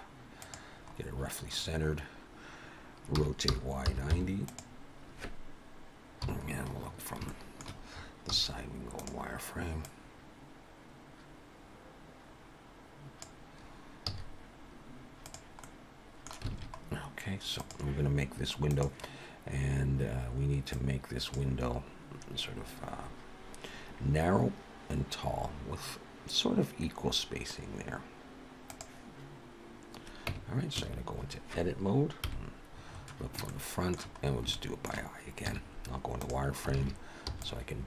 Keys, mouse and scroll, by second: 0.8 scroll up 3, 1.6-2.1 scroll down 4, 3.2 r, 6.2 KP_3, 6.8-7.3 scroll up 5, 7.3 shift+middle click, 8.3 z, 9.9 click, 14.1 z, 15.6 middle click, 16.5 alt+a, 16.8-17.4 scroll down 3, 17.6 click, 30.3 Tab, 30.8 a, 32.2 KP_1, 32.9-33.4 scroll up 5, 33.5 shift+middle click, 34.2 scroll up 1, 34.5 shift+middle click, 35.5 z, 36.8 alt+a, 37.3 b.